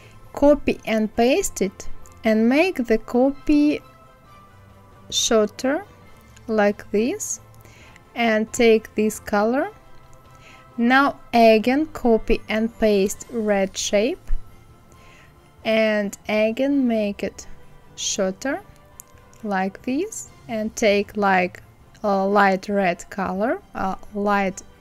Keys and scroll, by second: 0.9 ctrl+f, 14.2 ctrl+c, 14.9 ctrl+f.